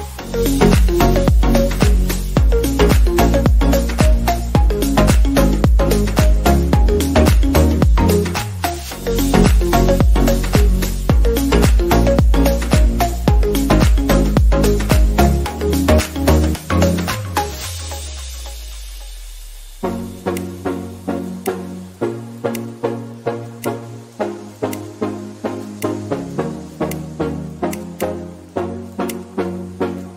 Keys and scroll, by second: 12.1 ctrl+j, 21.4 ctrl+x, 21.6 ctrl+z, 27.4 ctrl+d.